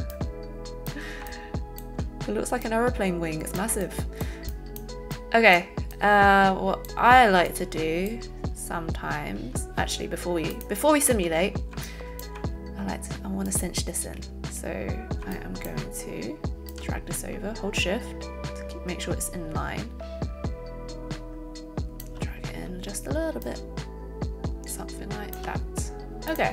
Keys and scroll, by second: 11.0 z, 11.7 alt+z.